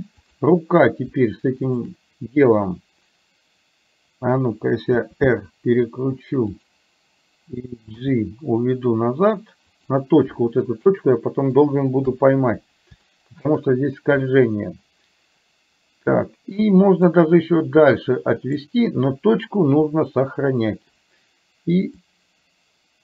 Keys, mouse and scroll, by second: 0.4 click, 1.7 shift+click, 5.1 r, 8.1 g, 11.0 shift+middle click, 12.1 KP_3, 13.1-13.5 shift+scroll up 1, 17.2-18.7 drag, 20.0 r, 22.1-23.0 drag.